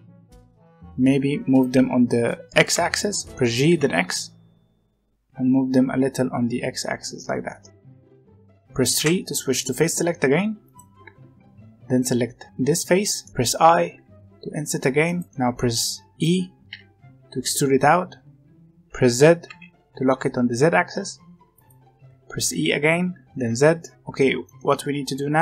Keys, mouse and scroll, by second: 0.0 g, 1.3-1.8 scroll up 1, 2.7 g, 7.9 middle click, 8.0 z, 8.1 middle click, 8.9 3, 10.6 click, 12.4-13.9 middle drag, 13.9 i, 15.2-16.6 middle drag, 16.6 e, 22.4 e, 24.4-25.4 middle drag.